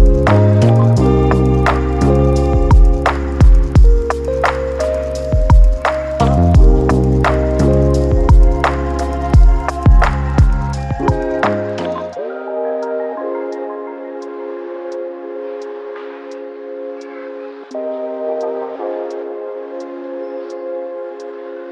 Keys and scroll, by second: 0.2 ctrl+c, 2.6-3.5 typing, 6.4-7.3 typing, 14.0-14.9 typing, 16.5-17.4 typing, 21.3-21.7 typing.